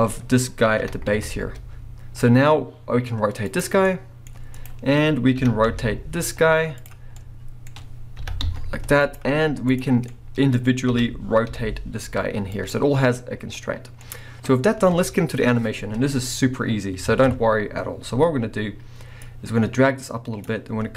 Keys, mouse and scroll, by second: 0.8 r, 3.6 right click, 3.8-4.5 middle drag, 4.5 click, 4.7 middle click, 5.4 r, 6.9 right click, 7.1-9.2 middle drag, 8.2 r, 9.2 right click, 9.7 click, 10.0 scroll down 1, 10.1-12.7 middle drag, 10.9 r, 12.7 right click, 13.4-14.0 scroll down 2, 14.0 scroll down 1, 14.0-19.2 middle drag, 17.1 alt+a, 19.2-20.9 drag.